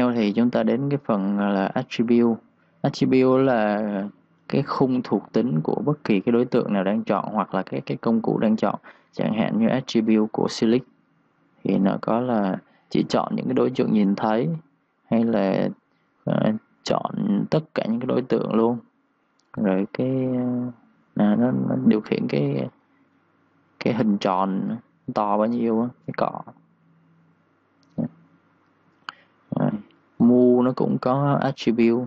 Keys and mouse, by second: 1.2 ctrl+shift+d, 4.6 Escape, 9.9 click, 13.4 click, 19.3 click.